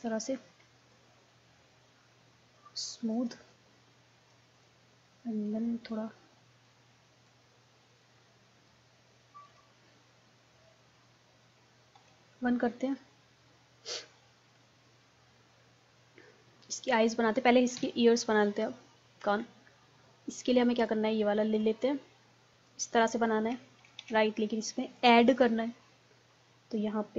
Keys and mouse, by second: 0.4-2.5 drag, 4.7-10.6 drag, 10.6 middle click, 12.0 KP_1, 17.8 KP_3, 22.6-24.1 drag, 24.1 ctrl+z, 24.4 click, 25.7-27.1 drag.